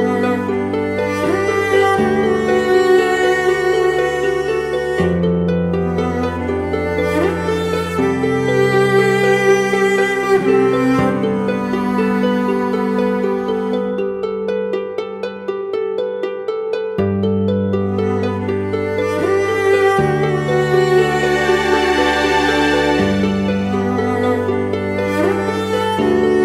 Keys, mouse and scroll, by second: 7.3 Return, 14.3 double click, 20.7 ctrl+t.